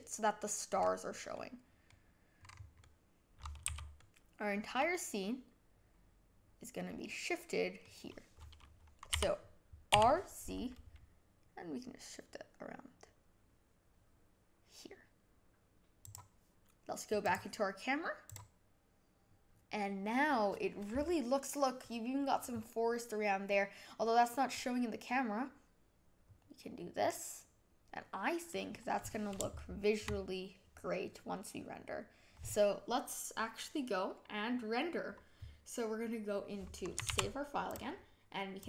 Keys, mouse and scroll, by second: 0.0 click, 0.6 scroll down 4, 1.3-2.3 middle drag, 2.3 scroll down 5, 2.7-3.6 middle drag, 3.6 a, 3.9-6.9 middle drag, 9.1 r, 17.2 click, 18.2 click, 24.4-25.5 scroll up 1, 26.2-28.5 scroll down 1, 28.5-33.4 middle drag.